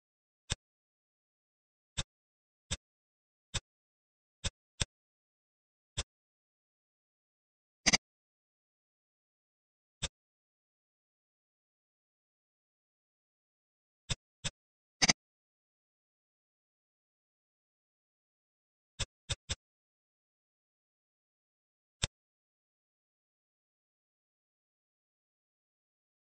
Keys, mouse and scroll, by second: 0.3 click, 1.3 ctrl+r, 3.4 click, 4.4 click, 4.7-5.8 middle drag, 5.8-7.3 drag, 7.9 click, 8.6 s, 10.2 ctrl+z, 10.9 s, 14.3 click, 14.9 click, 15.5 s, 19.1 click, 19.4-26.2 middle drag.